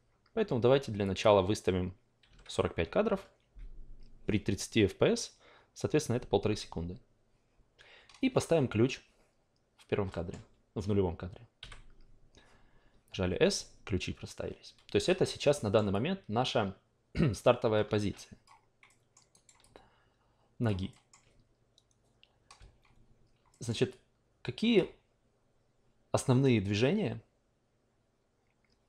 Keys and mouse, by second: 1.0 click, 10.1 alt+middle click, 11.6 s, 15.6 alt+middle drag, 15.9-18.4 alt+drag, 18.9-19.3 alt+middle drag, 19.3-19.7 alt+right drag, 19.7-20.7 alt+drag, 20.9 alt+middle drag, 23.5 alt+middle click, 23.9 alt+click.